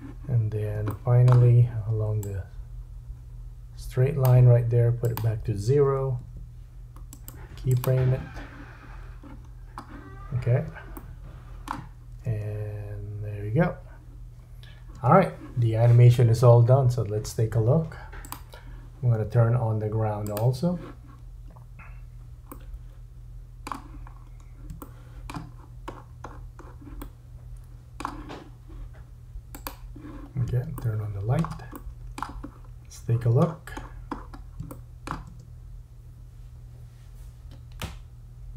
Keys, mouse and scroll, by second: 0.9 shift+middle click, 2.2 click, 5.0 click, 7.1 right click, 9.3-10.1 scroll down 4, 10.9 shift+middle click, 12.3 space, 15.0 space, 18.2 click, 20.3 click, 22.5 middle click, 24.1-24.7 scroll up 3, 24.8 shift+middle click, 25.5-27.0 scroll up 8, 27.0 middle click, 29.6 click, 30.8 shift+middle click, 31.8 middle click, 32.5-34.6 scroll down 10, 34.7 shift+middle click, 35.3 space.